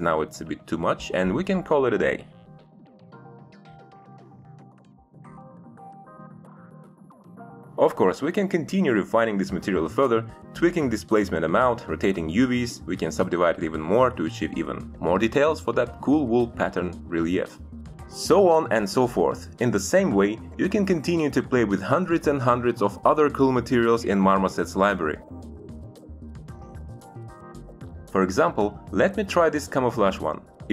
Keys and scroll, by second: 11.8 7, 11.9 Return, 14.9 1, 15.1 Return, 26.0 Delete.